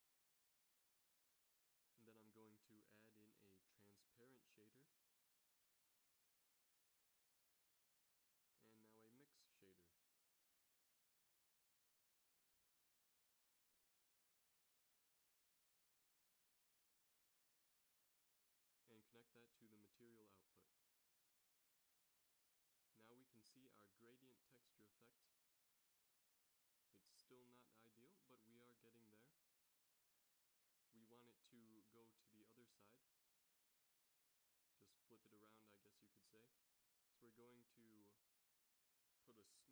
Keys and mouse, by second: 0.3 middle click, 2.4 shift+a, 8.8 shift+a, 12.5 f, 14.2 f, 20.8-21.7 middle drag, 22.0 shift+z, 32.0 z, 33.5 middle click, 33.9 middle click, 34.1 middle click, 34.8 middle click, 36.8-37.9 middle drag, 37.9-39.7 drag.